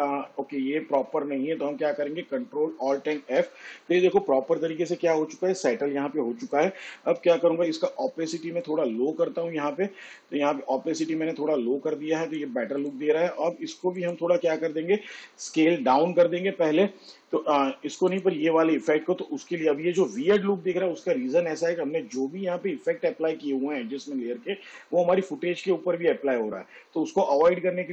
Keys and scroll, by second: 0.0 s, 3.7 ctrl+alt+f, 7.8 t.